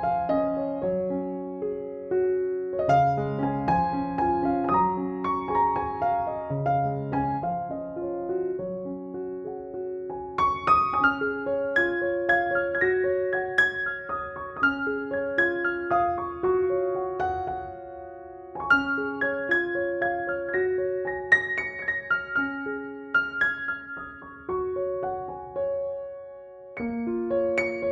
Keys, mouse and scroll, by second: 0.5 space, 0.8-1.8 click, 1.8 space, 1.9-2.9 click, 2.9 space, 3.0-4.0 drag, 6.3 ctrl+-, 8.6 ctrl+click, 9.1 ctrl+e, 9.8 click, 11.8 ctrl+=, 13.3 ctrl+j, 13.6 ctrl+u, 15.2-16.5 drag, 17.6-22.0 typing, 17.8 click, 19.9-20.7 click, 21.6-22.6 drag, 24.6 right click, 25.7 click, 26.5 x, 27.1-27.9 ], 27.8 x.